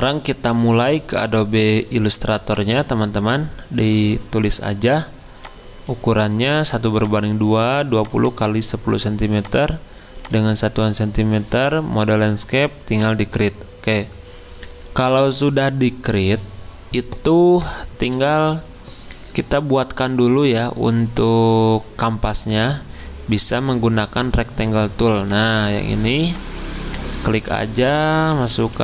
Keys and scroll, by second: 28.1-28.8 typing.